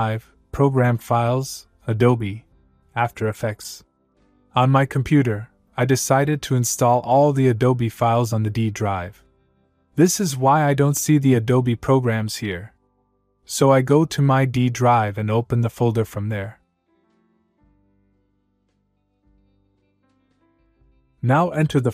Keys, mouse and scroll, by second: 1.5 click, 2.8 click, 14.5 click, 16.4 click, 17.8 click, 19.1 click, 20.5 click.